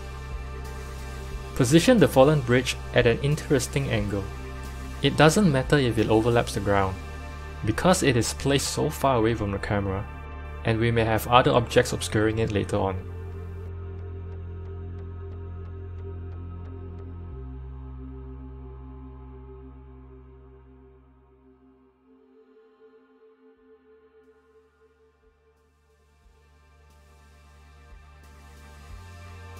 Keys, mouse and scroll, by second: 3.2-3.5 scroll up 2, 3.5-4.6 shift+middle drag, 4.6 g, 5.8 KP_7, 7.5-8.4 shift+middle drag, 8.4 KP_1, 9.0-11.7 shift+middle drag, 11.7-13.7 drag, 13.7 shift+right click, 14.2 r, 16.9 KP_7, 18.5 shift+right click, 19.0 r, 20.9 g, 23.1 click, 26.3-26.7 shift+middle drag, 26.7-28.7 scroll down 3, 28.7-29.1 scroll down 1.